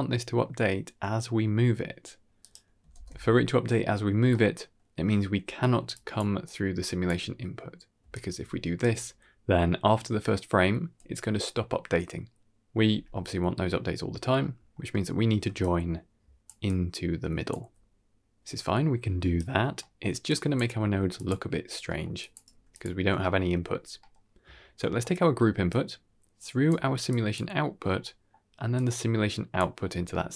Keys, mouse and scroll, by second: 2.8 ctrl+space, 4.2 middle click, 5.6-8.8 typing, 5.8 click, 6.3 click, 8.0-8.7 drag, 8.0 right click, 14.3 middle click, 14.8 middle click, 15.3-17.8 typing, 15.5 click, 16.5 click, 18.9 click, 18.9 right click, 19.2 d, 19.7 middle click, 19.7 d, 20.2 click, 20.6 s, 21.7 middle click, 22.1 drag, 22.4 g, 23.9 middle click, 24.7 middle click, 25.6-26.6 drag, 27.0 click, 27.8 scroll down 1, 27.9-28.2 middle drag, 28.6-29.5 drag, 30.0-30.3 middle drag.